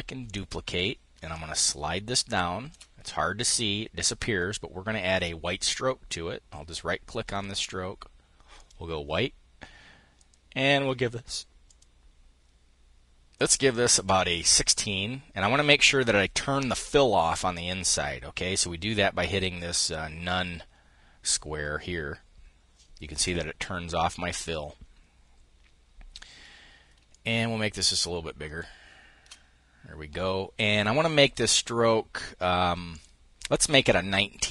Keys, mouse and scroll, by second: 0.9-2.7 ctrl+shift+drag, 6.8 click, 8.2 click, 9.8 click, 11.3 click, 13.0 click, 13.8 click, 19.4 click, 26.7-28.9 ctrl+shift+drag, 32.5 click, 33.4-34.5 drag.